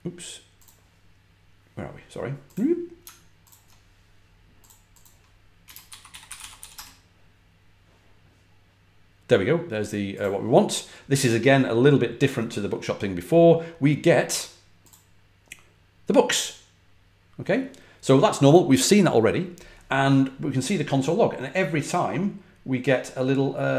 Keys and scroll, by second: 5.3-7.0 typing.